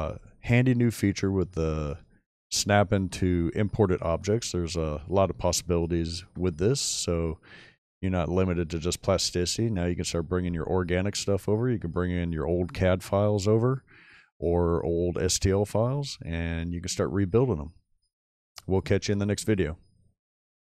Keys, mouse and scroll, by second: 0.5 shift+middle click, 2.4 scroll down 2, 2.7 shift+middle click, 3.8-4.4 scroll up 3, 4.4-5.1 shift+middle drag.